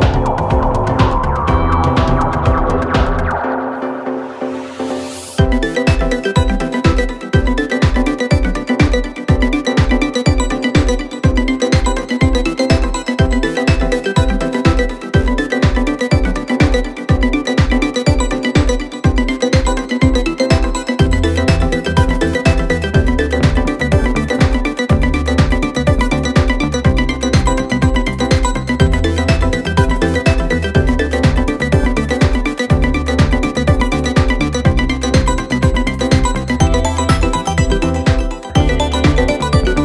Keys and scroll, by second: 9.4 shift+f, 11.2 ], 12.4 4, 19.9 3, 20.4 ], 22.2 4, 25.2 ctrl+z, 31.4 ], 34.6 ], 35.6 4.